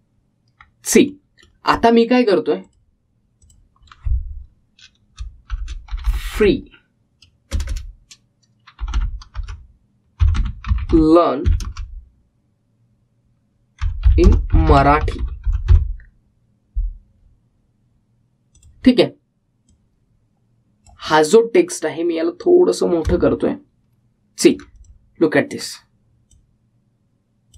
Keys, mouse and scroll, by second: 1.3-1.7 scroll up 1, 2.2-3.8 middle drag, 3.8 click, 6.5-8.0 typing, 9.9-12.8 typing, 14.7-17.3 typing, 19.7-25.9 drag, 26.3-26.7 scroll up 1.